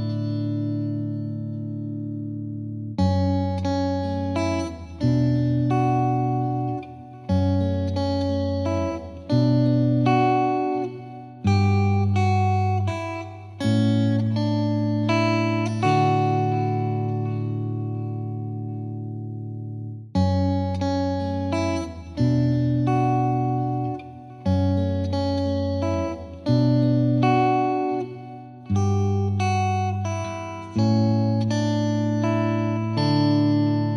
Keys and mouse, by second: 1.5 click, 2.2 click, 2.6 click, 3.0 click, 4.8 click, 5.2 shift+click, 6.0 click, 6.6 right click, 7.9 click, 8.2 click, 9.9 click, 11.3 right click, 11.8 right click, 11.8 Page_Up, 12.3 click, 12.5 F2, 12.9 click, 13.4 click, 13.8 click, 14.0 ctrl+click, 14.6 click, 14.8 click, 15.3 right click, 16.0 click, 16.9 click, 17.6 click, 19.4 right click, 19.7 click, 19.9 click, 20.3 click, 21.9 click, 23.1 click, 24.5 click, 24.7 click, 25.0 click, 25.9 click, 27.3 click, 27.7 click, 29.5 click, 30.1 Escape, 30.4 F3, 30.5 F3, 30.8 click, 31.2 click, 32.3 click, 32.5 shift+click, 32.9 shift+click.